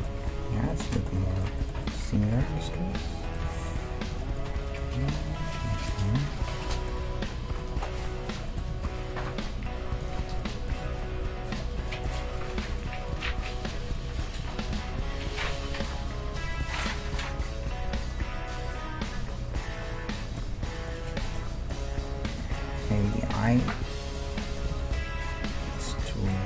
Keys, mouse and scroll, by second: 0.3-0.7 scroll up 1, 0.7-6.4 middle drag, 2.3-6.8 right drag, 3.5 g, 4.8 g, 7.0 g, 8.7 g, 10.0 middle click, 10.3-16.1 right drag, 10.8 g, 11.7-13.8 middle drag, 12.6 g, 14.7 g, 15.7 g, 16.6-18.4 middle drag, 20.6-22.8 middle drag, 22.3 Tab, 22.8 right click, 23.6-26.3 middle drag, 24.7 g, 26.3 Tab.